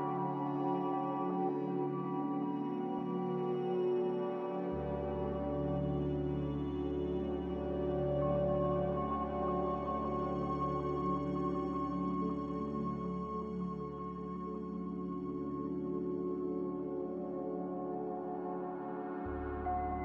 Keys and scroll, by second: 7.0 z, 8.9-9.8 typing, 14.3 5, 14.6 Return, 18.0 n.